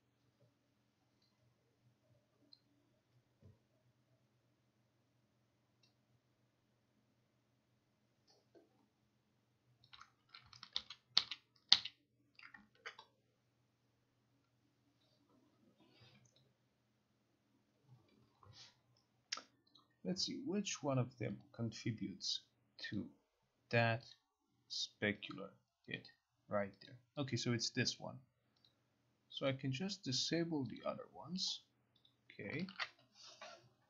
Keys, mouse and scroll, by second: 10.0 click, 10.8 ctrl+z, 11.3 ctrl+z, 11.8 ctrl+z, 12.8 ctrl+r, 19.8 click, 21.5 click, 23.0 click, 23.6 click, 24.2 click, 25.3 click, 26.0 click, 27.0 click, 28.8 click, 29.6 click, 30.9 click, 32.1 click.